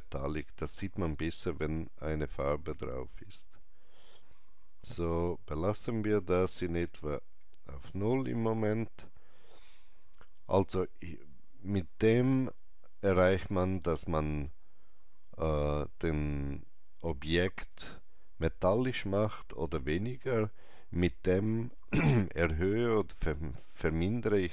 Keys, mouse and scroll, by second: 4.9-8.7 drag, 8.5 scroll down 1.